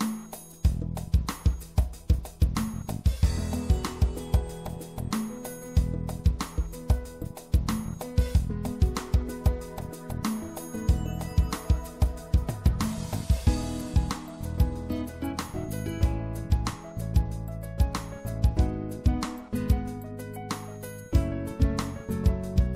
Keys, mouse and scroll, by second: 0.7-4.0 right drag, 5.3 right click, 7.7-9.0 drag, 9.0 right click, 9.5-10.9 drag, 13.1-17.7 middle drag, 17.7-22.5 drag.